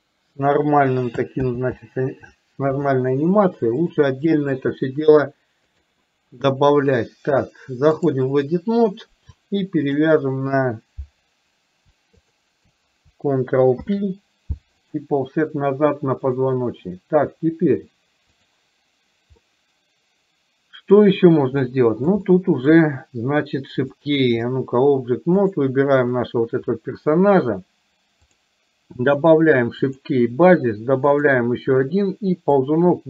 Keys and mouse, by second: 1.5 ctrl+z, 3.9 click, 6.0-8.3 drag, 9.9 shift+click, 12.4 shift+click, 13.9 ctrl+p, 16.4-18.6 drag, 19.5-21.1 middle drag, 21.8 middle click, 22.4 shift+middle click, 24.0 click, 25.6 drag, 32.6-33.0 drag.